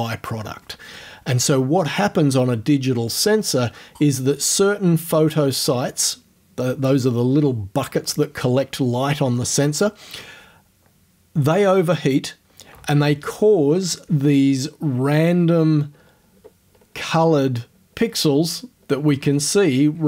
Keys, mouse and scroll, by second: 14.7-15.7 ctrl+scroll up 4, 15.9-16.5 ctrl+scroll up 2, 16.5-18.2 ctrl+scroll up 5, 18.5-19.3 ctrl+scroll up 2.